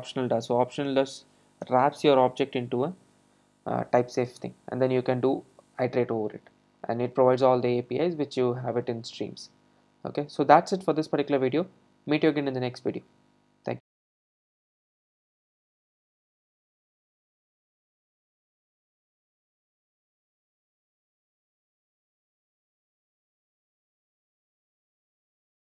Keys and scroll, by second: 3.0 super+s.